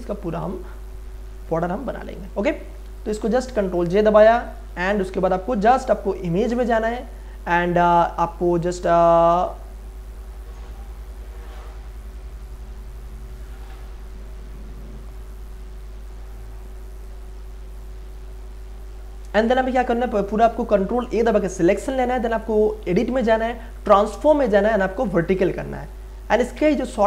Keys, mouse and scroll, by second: 1.1 ctrl+j, 2.1 click, 4.7 ctrl+j, 6.7 click, 19.1 click, 21.1 ctrl+a, 22.9 click, 23.0 click, 26.1 click.